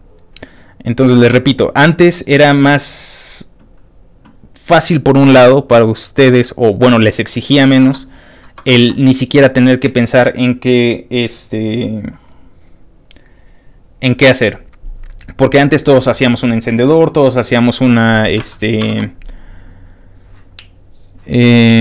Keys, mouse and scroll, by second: 0.4-0.8 scroll down 2, 0.8 scroll up 2, 1.3 ctrl+w, 2.1 middle click, 2.2 scroll down 1, 2.7 middle click, 2.8 middle click, 3.2-4.2 scroll down 1, 4.7-6.9 scroll down 4, 6.9 scroll up 2, 7.9 alt+Tab, 8.4 alt+Tab, 9.6 scroll up 1, 9.6-10.0 scroll down 1, 10.0 scroll up 2, 13.7-18.4 scroll down 2, 18.4 alt+Tab.